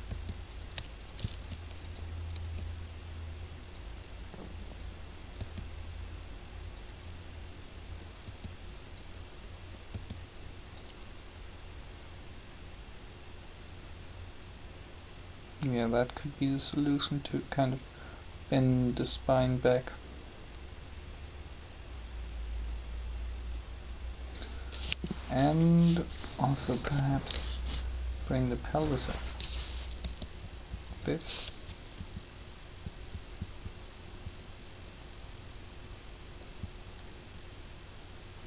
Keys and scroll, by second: 1.4 shift+r, 2.4 r, 5.4 r, 8.2 r, 26.6 3, 30.0 r.